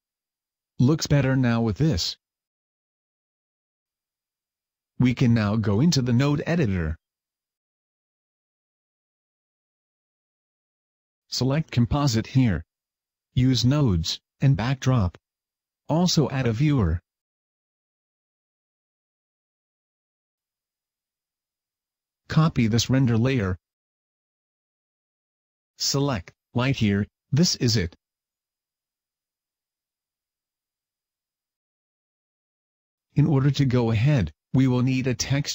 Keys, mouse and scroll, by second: 7.3 Escape, 8.7 click.